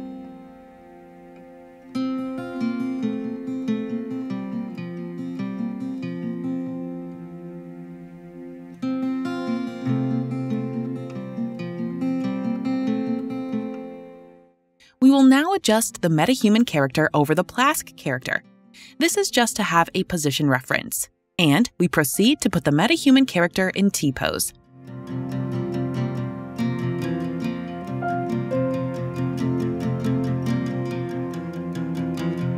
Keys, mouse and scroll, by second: 2.2 click, 2.5 click, 4.4-7.2 drag, 4.4-8.2 w, 8.3 right click, 8.3 w, 8.4 w, 10.1 click, 11.9 click, 13.1 1, 13.9 Return, 16.8 click, 17.7 d, 18.2-18.9 d, 19.4 right click, 22.4 click.